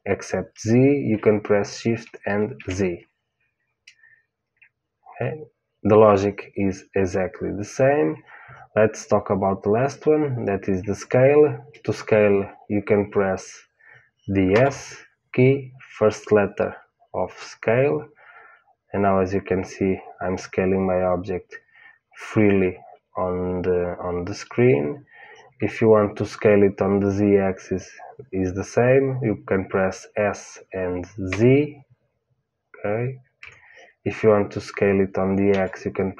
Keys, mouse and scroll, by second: 14.5 s, 35.4 s.